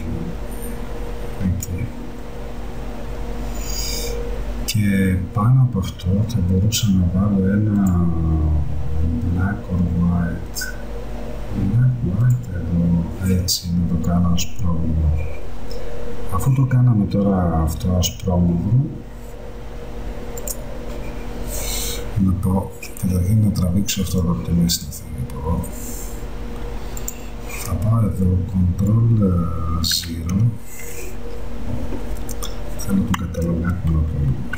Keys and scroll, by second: 30.0 ctrl+0.